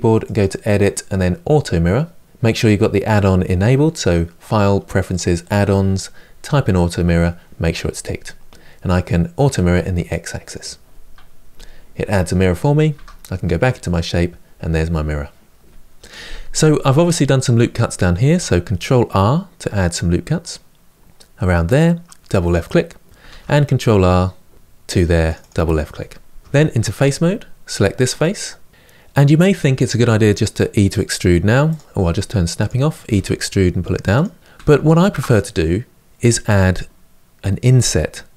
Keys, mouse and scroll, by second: 10.2-12.6 drag, 12.6 Tab, 17.9 ctrl+r, 23.0 ctrl+r, 26.6 3, 27.4 click, 27.9-29.8 middle drag, 29.8 e, 32.3 click, 32.8 e, 34.4 ctrl+z.